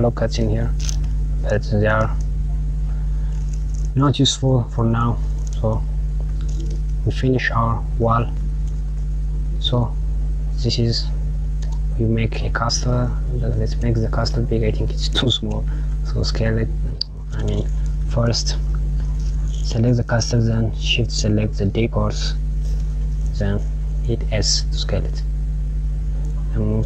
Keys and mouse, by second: 1.4 click, 5.9 Tab, 7.2 click, 7.9 click, 10.1 click, 11.3 click, 13.0 click, 14.7 click, 15.5 s, 18.3 KP_Add, 20.7 shift+click, 21.5 shift+click, 22.6-23.0 KP_Subtract, 23.1 KP_Subtract, 23.9 s, 26.1 KP_1.